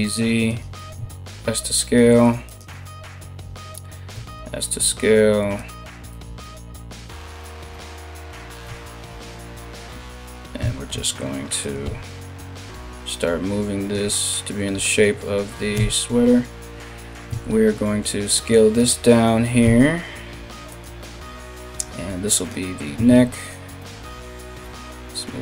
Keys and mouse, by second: 0.5 s, 3.7 s, 5.7 KP_3, 8.2 2, 8.9 alt+right click, 10.2 s, 11.4 g, 15.3 KP_1, 16.9 s, 19.2 s, 20.6 g, 22.7 ctrl+z, 23.4 g.